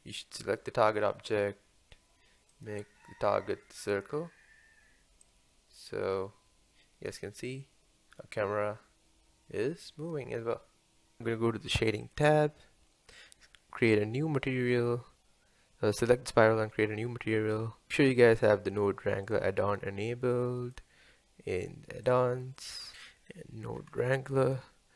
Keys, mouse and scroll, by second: 2.5-8.4 drag, 11.2 click, 12.1 click, 14.6 drag, 19.6-21.6 drag.